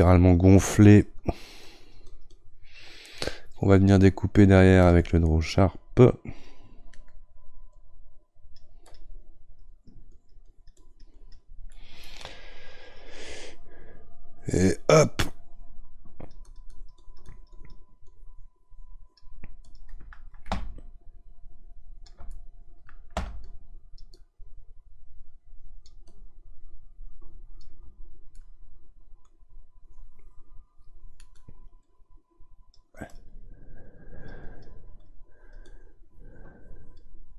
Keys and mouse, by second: 8.1-9.5 right drag, 9.5-11.7 drag, 11.7-15.0 middle drag, 15.0-22.3 drag, 22.3-23.4 middle drag, 23.4-28.4 ctrl+drag, 28.4-32.3 middle drag, 32.3 right click, 33.1-37.3 drag.